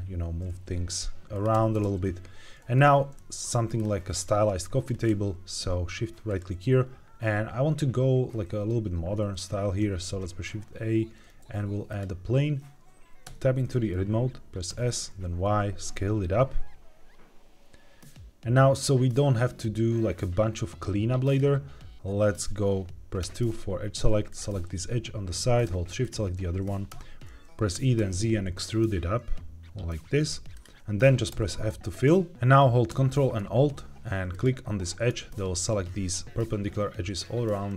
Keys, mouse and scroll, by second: 1.2 click, 1.4 g, 1.7 shift+z, 2.7 click, 3.1 middle click, 3.7-4.5 scroll down 1, 4.8-5.5 scroll up 2, 9.8 shift+a, 15.1 y, 21.2 click, 23.1 2, 25.9 shift+click, 26.8 e, 27.2 ctrl+z, 27.2 right click, 27.6 e, 27.9 z, 30.4 click, 31.2 f, 34.2 ctrl+alt+click.